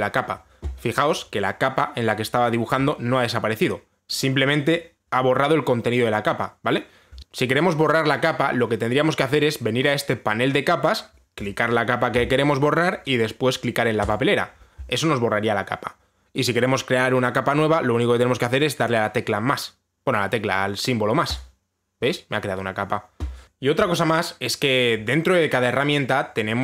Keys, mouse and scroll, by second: 12.1 click, 14.8 click, 22.0 click.